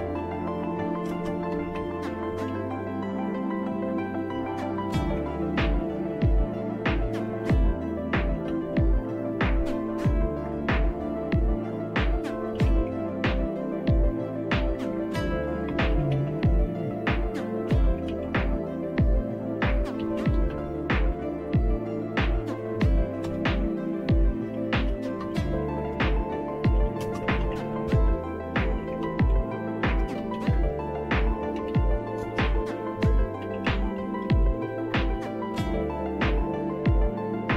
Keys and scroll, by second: 0.0-2.7 typing, 6.2 typing, 7.4-9.0 typing, 10.5 BackSpace, 10.7 BackSpace, 10.9 BackSpace, 12.1-13.2 typing, 14.7-18.2 typing, 18.2 Tab, 19.7-21.1 typing, 23.2 Return, 25.0-34.7 typing, 34.9 Return.